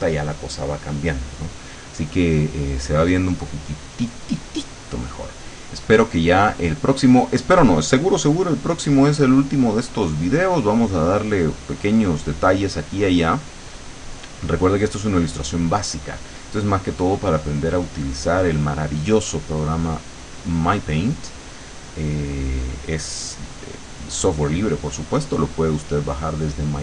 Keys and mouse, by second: 6.3-11.9 drag, 12.1-15.2 drag, 17.1-21.3 drag, 21.5-23.0 drag.